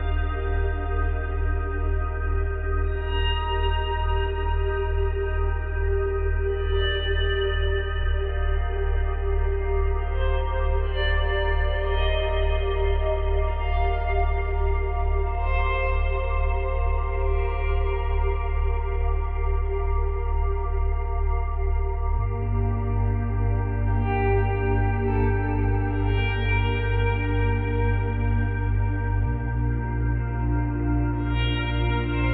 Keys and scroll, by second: 2.2 space, 4.7 space.